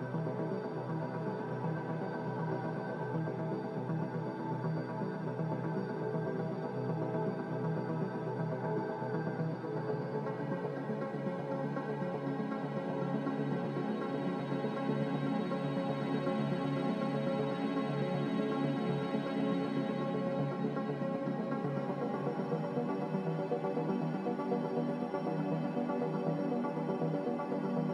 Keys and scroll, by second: 3.6-4.5 typing, 18.1 x, 19.6-20.5 typing, 20.6 Return, 23.8 z.